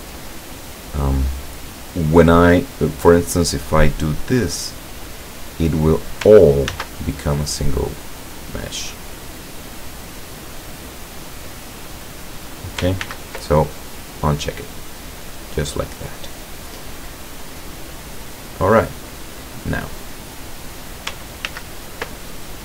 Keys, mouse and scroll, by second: 0.7-2.2 right drag, 3.9-6.4 drag, 6.8 ctrl+z, 8.1 click, 9.2-12.3 drag, 13.1 ctrl+z, 14.0 click, 15.1-21.2 drag, 21.5 ctrl+z.